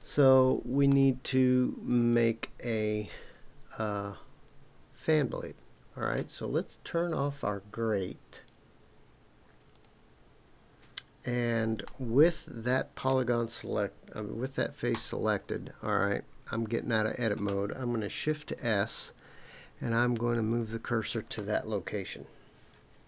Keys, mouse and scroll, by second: 0.9-6.2 middle drag, 9.7 click, 11.8-13.1 middle drag, 14.9 Tab, 18.4 shift+s, 21.3-23.0 middle drag.